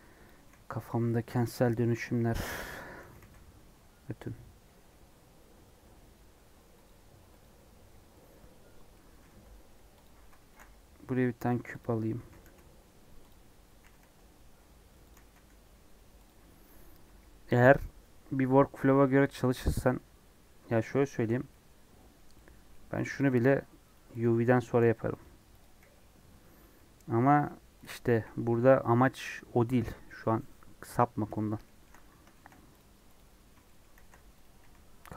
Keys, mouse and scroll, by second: 0.2 click, 0.4 g, 2.7 click, 3.0 g, 7.4 click, 11.7 shift+a, 12.2 s, 13.3 scroll up 2, 13.7 s, 19.9-23.2 middle drag, 23.2 click, 23.4 g, 24.1 click, 24.7 g, 25.5 click, 26.1 g, 26.7-27.8 middle drag, 27.8 click, 28.0 KP_1, 31.6 shift+middle click, 31.9 scroll up 1, 32.3 shift+middle click, 32.7 click, 33.1 click, 33.3 scroll up 2, 33.6 shift+middle click, 33.9-35.1 typing.